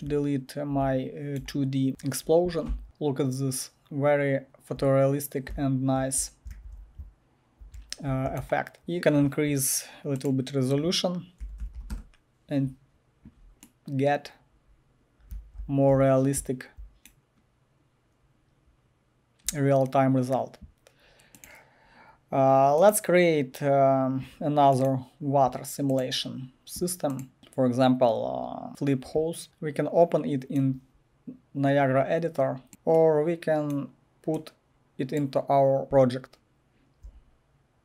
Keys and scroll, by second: 0.1-9.5 typing, 2.8 Delete, 11.2-12.3 typing, 15.1-16.4 typing, 29.4 Return, 35.8-37.3 typing.